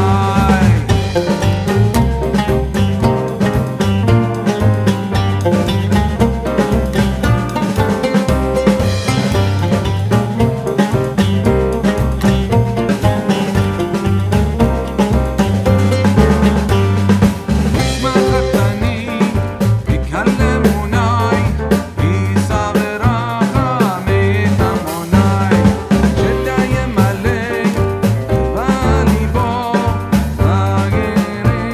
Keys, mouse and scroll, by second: 4.2 right click, 4.9 click, 7.4-15.4 drag, 15.4 right click, 15.9 click, 16.8-19.5 alt+shift+drag, 18.9 typing, 21.0-25.2 drag, 22.3-23.1 typing, 26.8 click, 28.5-31.7 drag, 30.3 typing.